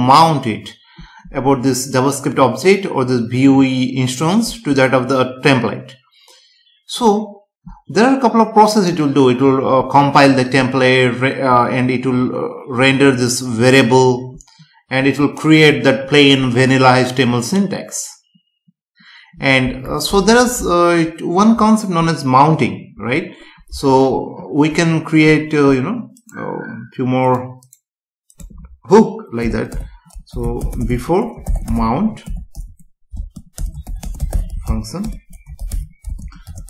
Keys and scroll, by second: 29.7 Return, 33.1 space, 33.5 BackSpace, 34.0 space, 35.0 Return, 36.0 space.